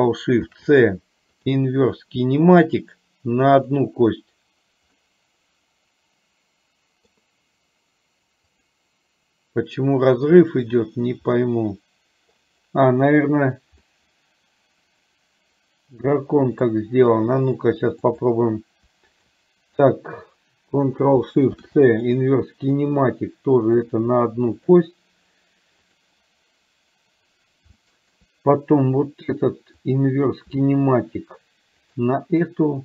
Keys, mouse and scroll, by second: 0.5 ctrl+shift+c, 5.0-7.3 middle drag, 11.4-12.4 middle drag, 14.0-16.8 middle drag, 18.2 click, 19.3 shift+click, 21.5 ctrl+shift+c, 23.9 click, 24.5 click, 26.0 click, 27.9 shift+middle drag, 29.9 click.